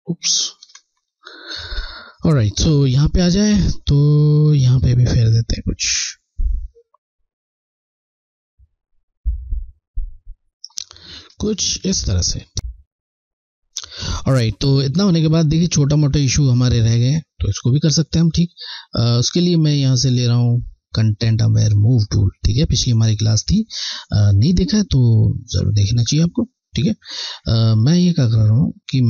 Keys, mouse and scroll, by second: 0.9 ctrl+z, 5.2 click, 5.3 click, 11.1 scroll, 11.3 alt+scroll down 1, 12.1 scroll, 19.7 click, 22.6 Left.